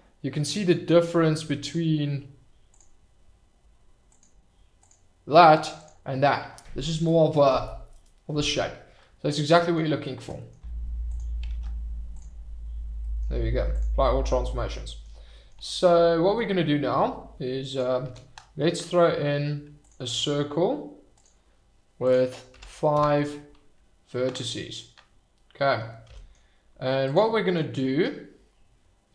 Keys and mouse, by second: 1.6 click, 2.7 click, 4.3 click, 4.8 click, 9.3-9.7 middle drag, 10.6 ctrl+z, 11.5 ctrl+a, 13.0 middle click, 14.0 middle drag, 14.8 middle drag, 15.4 shift+right drag, 15.8-16.3 middle drag, 17.3 Escape, 18.0 shift+a, 22.0-23.3 drag, 26.0 g, 27.0 click, 27.9 click.